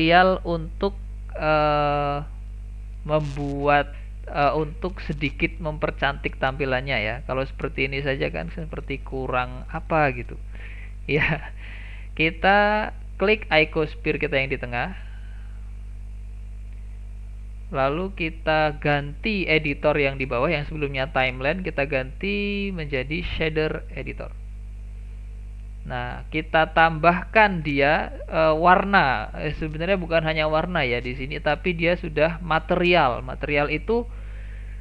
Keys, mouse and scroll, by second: 1.0-4.2 drag, 7.5-8.7 middle drag, 8.7-9.0 scroll up 2, 9.0-10.3 middle drag, 10.3-10.6 scroll down 2, 10.6-13.7 middle drag, 14.5 click, 15.2 click, 15.7 click, 16.3 click, 18.2 click.